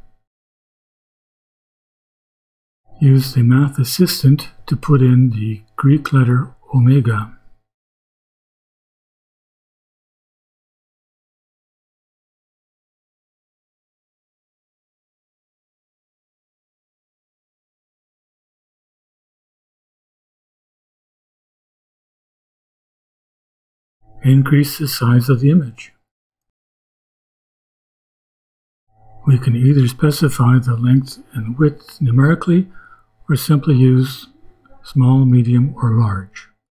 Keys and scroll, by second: 6.2 ,, 6.8 d, 7.5 shift+b, 12.4-15.8 typing, 17.0 shift+Return, 22.7 ,, 23.8 Return, 24.1-27.7 typing, 29.4-32.8 typing, 34.3 shift+Return.